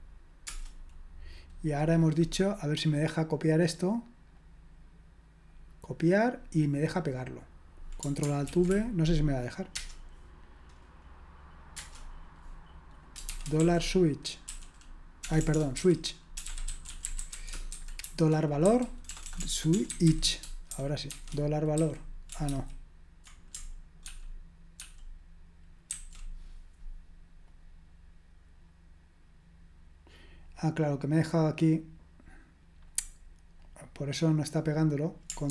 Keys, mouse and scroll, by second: 5.8 right click, 7.0 click, 8.5 ctrl+alt+v, 13.3-15.4 typing, 16.4-21.8 typing, 22.5 ctrl+c, 24.1 ctrl+p, 24.8 ctrl+p, 25.9 ctrl+c, 33.8-35.5 drag.